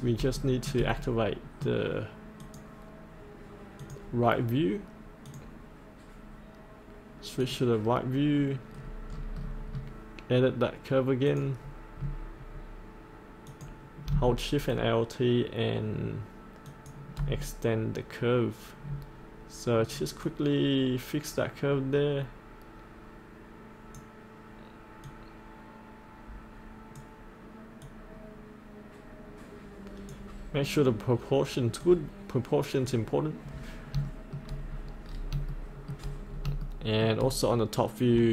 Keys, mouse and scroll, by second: 0.3 shift+middle click, 1.0 middle click, 2.4 click, 8.8-11.3 scroll down 1, 11.3 click, 12.0-12.6 scroll down 1, 13.4 click, 16.7-24.3 alt+shift+drag, 24.3-29.3 drag, 29.4-30.4 drag, 30.5-33.5 drag, 33.6-33.9 scroll up 1, 34.1 shift+middle click, 34.6-35.3 scroll down 1, 35.5 shift+middle click, 36.2 scroll down 1, 36.6 shift+middle click, 38.0-38.3 drag.